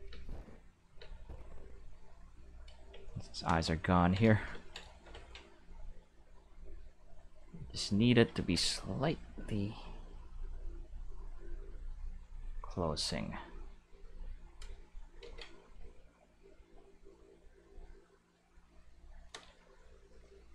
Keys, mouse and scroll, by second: 0.0-1.0 typing, 1.1-2.5 drag, 3.9 ctrl+middle click, 4.1 middle click, 6.0-8.1 drag, 8.3 ctrl+z, 9.1-11.7 drag, 12.6 click, 13.5-14.8 drag, 15.2 ctrl+z, 16.0-17.1 drag, 17.7 click.